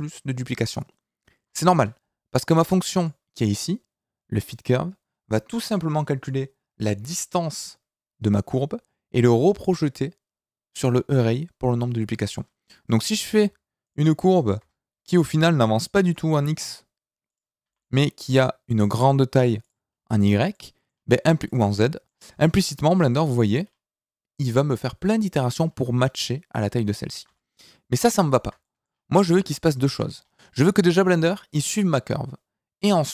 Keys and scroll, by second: 1.7 Escape, 2.7 Tab, 12.8 Tab, 16.0 g, 27.2 ctrl+z, 29.3 Tab.